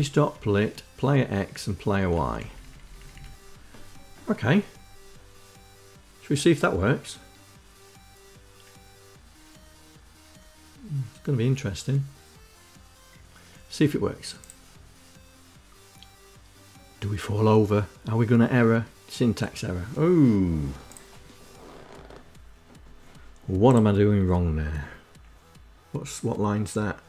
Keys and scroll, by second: 0.5 Down, 0.9 Down, 1.2 Down, 1.3 Down.